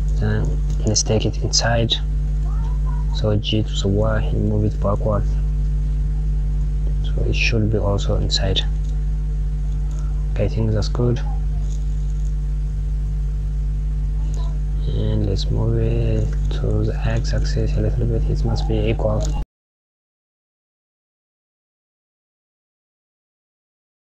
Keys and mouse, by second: 10.0 click, 10.9 click, 14.8 click, 15.5 g, 20.0 click, 20.1 g, 20.6 click, 21.1 KP_1, 21.5 KP_Add, 21.7 click, 21.9 click, 22.3 click, 22.6 g.